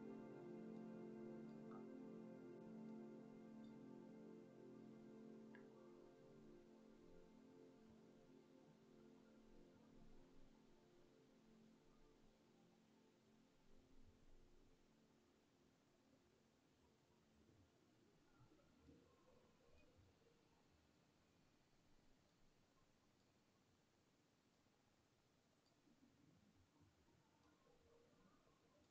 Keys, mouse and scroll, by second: 1.0 middle click, 1.9 scroll up 1, 3.1-3.8 middle drag, 4.1-4.9 scroll down 1, 6.5 scroll down 1, 7.0 scroll down 1, 8.3 scroll up 1, 8.8 scroll up 1, 19.1-20.1 middle drag, 20.3 scroll up 1, 22.6-23.4 middle drag, 24.2-24.8 scroll down 1, 24.8-25.9 middle drag, 27.7-28.9 middle drag.